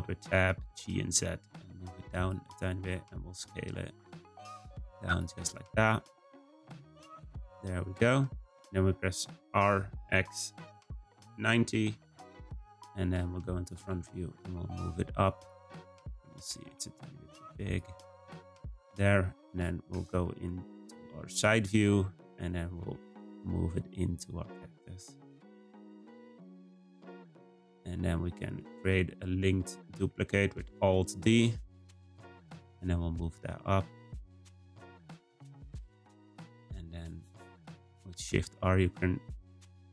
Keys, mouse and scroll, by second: 0.2 g, 2.8 s, 5.3 g, 6.9 Tab, 7.1 scroll down 3, 7.4-9.4 middle drag, 9.4 r, 13.8 g, 15.8-16.2 scroll up 1, 16.2 Tab, 16.5 a, 16.6 s, 18.2 Tab, 21.8-22.8 shift+middle drag, 22.8 g, 24.8 r, 27.7 shift+middle click, 28.1-28.6 scroll up 1, 28.6 shift+middle click, 29.3-30.3 scroll up 1, 30.3-31.7 shift+middle drag, 31.7-34.8 right drag, 38.3 shift+r.